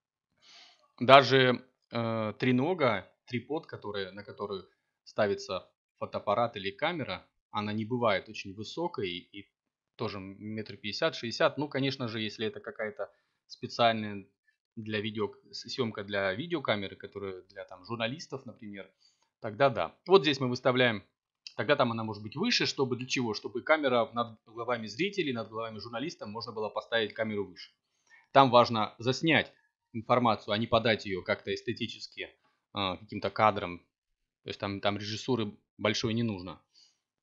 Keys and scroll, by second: 3.6 4, 4.4 5, 5.4 BackSpace, 6.2 0, 6.6 Return, 10.4 BackSpace, 12.3 c, 12.7 m, 14.4 BackSpace, 15.4 c, 15.8 m, 16.3 Return, 20.9 m, 31.9 7, 34.6 g.